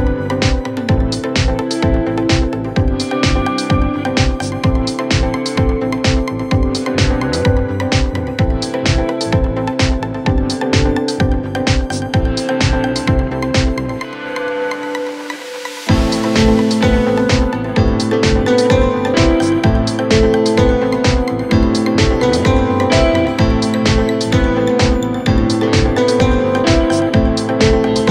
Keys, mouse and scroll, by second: 4.9 Return, 18.3 Return.